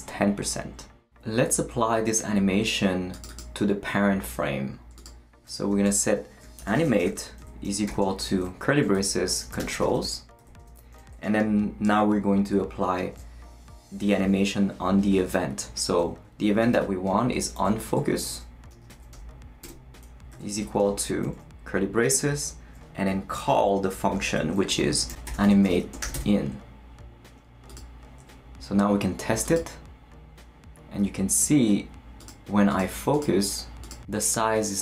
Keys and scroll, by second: 5.6-10.6 typing, 16.4-20.8 typing, 24.7-27.1 typing.